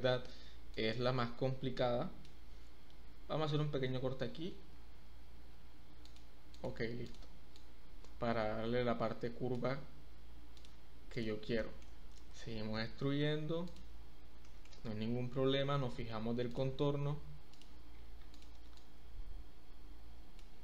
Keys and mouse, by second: 0.7-2.2 drag, 4.7 ctrl+r, 6.5 click, 7.6-9.5 drag, 10.6 click, 11.1 click, 11.6 shift+click, 12.3 e, 12.7 z, 13.6 click, 14.5 shift+middle click, 15.1 e, 15.6 z, 17.5 click, 18.3 click, 18.7-20.4 drag.